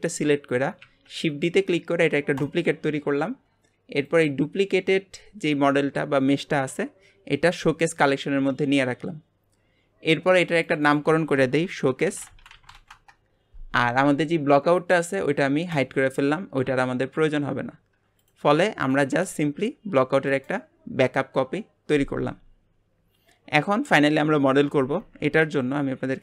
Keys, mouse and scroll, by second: 0.8 shift+d, 4.1 click, 10.7 click, 10.9-14.0 drag, 15.7 click, 18.2 click, 18.5 click, 18.8 click, 19.1 g, 23.2 scroll up 2.